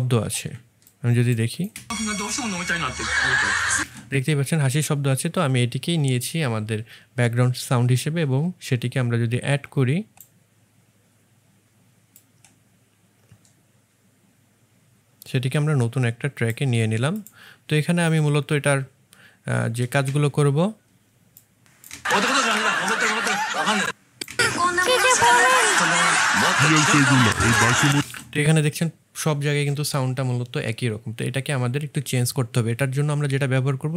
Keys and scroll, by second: 1.6 space, 20.0 space, 27.9 space.